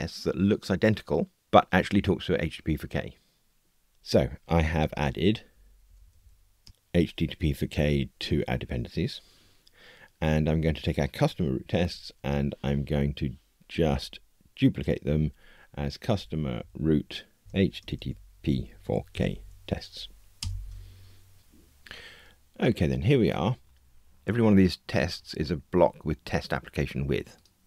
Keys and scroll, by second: 4.9 super+e, 11.8 super+1.